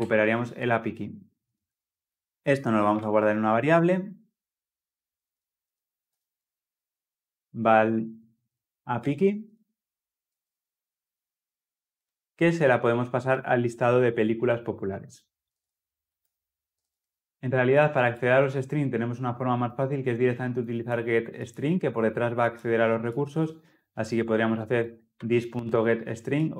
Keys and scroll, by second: 16.1 Return, 16.6 ctrl+alt+l, 16.7 ctrl+alt+o.